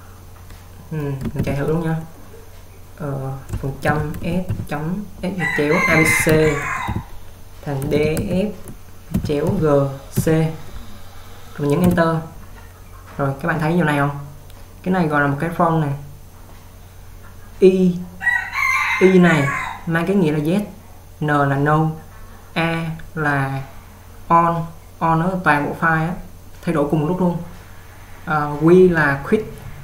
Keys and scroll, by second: 1.6 :.